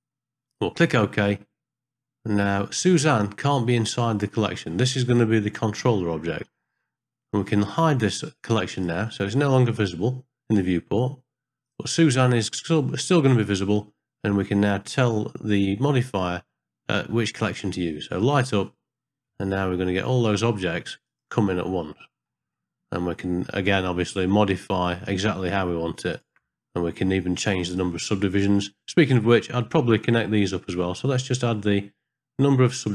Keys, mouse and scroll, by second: 8.8 click, 15.1-18.4 drag, 19.6 ctrl+middle click, 21.0 click, 22.0 middle click, 22.6 ctrl+middle click, 23.5 ctrl+middle click, 26.1-27.8 drag, 29.3 middle click.